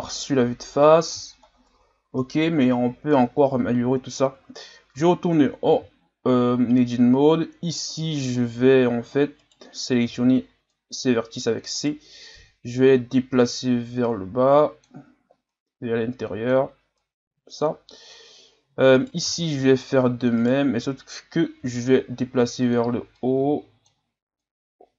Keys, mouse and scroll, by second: 0.8-1.4 scroll up 2, 1.4-1.8 scroll up 1, 2.0-3.2 scroll down 1, 5.0 Tab, 5.8 z, 6.3-7.3 scroll up 2, 9.4 right click, 10.1 c, 12.3 click, 15.5-18.9 drag, 18.9 right click, 19.2 c, 21.6 g, 23.2-24.9 drag.